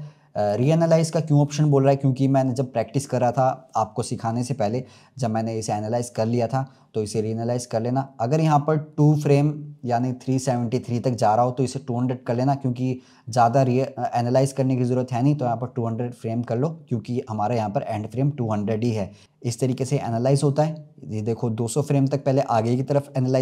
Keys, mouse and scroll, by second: 0.3 0, 0.3-3.4 drag, 19.2-19.7 drag.